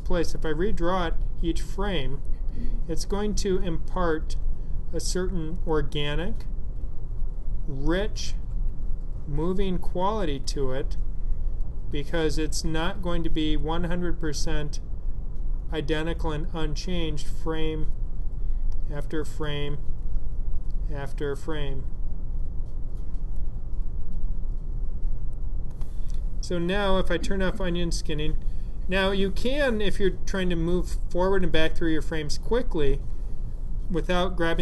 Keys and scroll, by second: 0.5 F7, 2.3 F7, 4.0 F7, 5.7 F7, 8.1 F7, 11.6 F7, 14.2 F7, 19.3 F7, 21.4 F7, 23.5 F7.